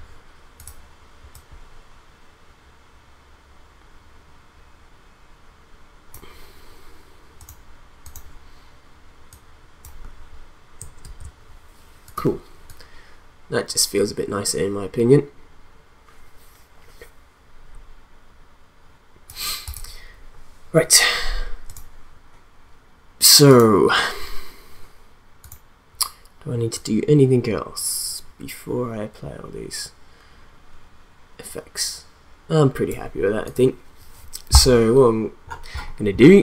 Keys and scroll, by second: 11.0 ctrl+z.